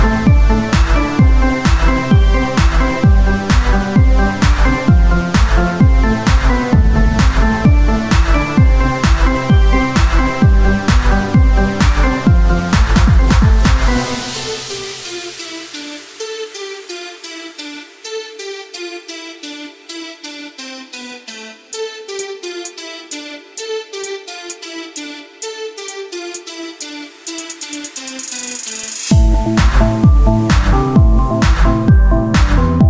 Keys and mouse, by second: 1.7 Tab, 6.5 Tab, 6.8-8.7 drag, 16.6 Tab, 18.4 Tab, 18.8 KP_3, 19.1 click, 19.2 z, 19.4 c, 20.8-22.5 drag, 22.5 z, 24.8 click, 25.0 Tab, 25.5 Tab, 26.1 KP_3, 26.5 z, 27.2 c, 29.0 z, 29.5 z, 31.3 c, 32.7 z.